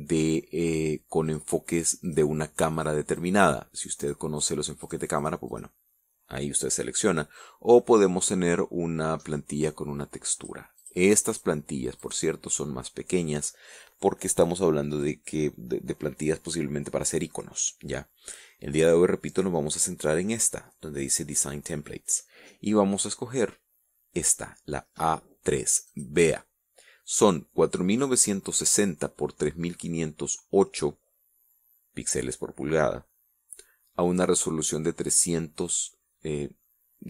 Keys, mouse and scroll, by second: 1.4 click, 2.2 click, 3.0 click, 3.4 click, 4.2 click, 4.6 click, 5.0 click, 5.4 click, 7.3 click, 8.7-9.4 scroll down 3, 9.4-9.7 scroll up 2, 10.6 click, 11.0 click, 11.5 click, 12.2 click, 19.0 click, 26.2 click.